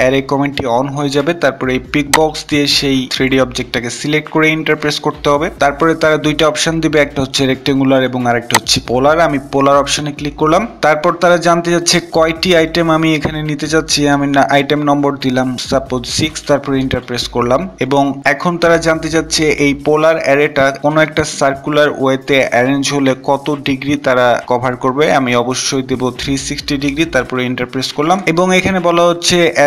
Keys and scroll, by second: 3.5 Return.